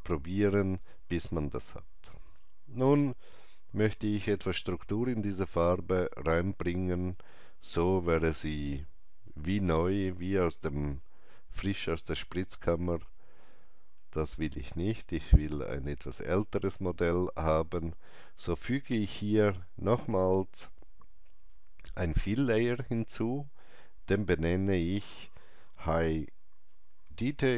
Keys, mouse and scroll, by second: 7.0 KP_Enter, 7.0-7.4 scroll up 1, 7.0 KP_4, 10.9 middle click, 21.9 click, 21.9 alt+middle click, 24.0 click, 25.8-27.5 typing, 26.7 double click.